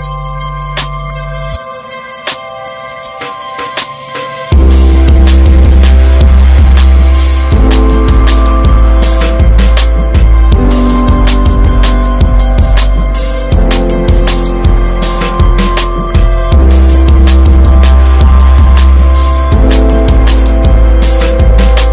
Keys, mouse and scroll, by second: 0.3 click, 0.5 scroll down 4, 0.7-1.1 middle drag, 1.2 scroll down 2, 1.6 shift+middle click, 1.7-2.2 scroll up 2, 1.9 middle click, 3.3 middle click, 3.5 scroll up 3, 3.8 shift+middle drag, 4.6 click, 5.0 Tab, 5.9 alt+z, 6.2 middle click, 6.5-7.6 scroll up 1, 7.6 a, 7.9 shift+middle click, 8.6 s, 9.7 Tab, 10.1 alt+z, 10.5 scroll down 5, 10.7 middle click, 11.0 drag, 11.3-12.2 middle drag, 12.2 scroll up 1, 12.3 ctrl+s, 12.8 alt+middle click, 14.0 click, 15.7-18.1 drag.